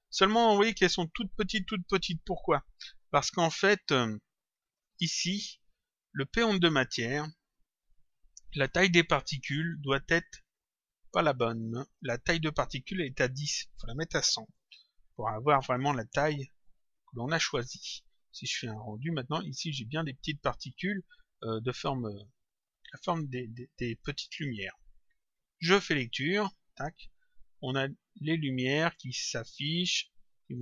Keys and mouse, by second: 0.1 click, 4.7 click, 6.9 click, 10.5 click, 13.4 click, 14.9 click, 16.6 click, 18.8 click, 22.4 click, 25.5 click, 26.6 click.